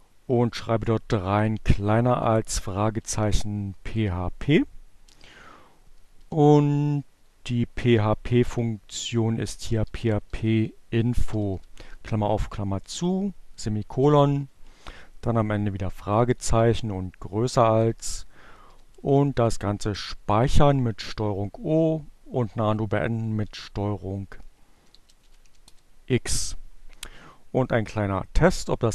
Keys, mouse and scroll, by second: 1.5-2.4 typing, 4.1-6.5 typing, 8.9-12.3 typing, 14.8 shift+,, 17.1 ctrl+o, 19.5 Return, 22.1 ctrl+x, 24.3-25.5 typing, 27.7-28.9 drag.